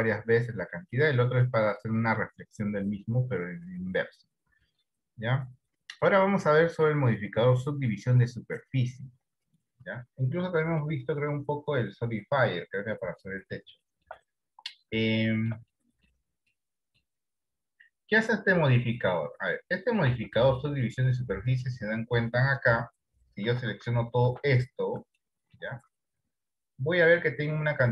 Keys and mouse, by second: 11.1-12.8 drag, 13.6 middle click, 14.0 shift+middle click, 15.2 shift+middle click, 15.9 middle click, 16.6 ctrl+middle click, 20.4 Tab, 23.7 a, 24.0 a, 25.4 shift+middle click.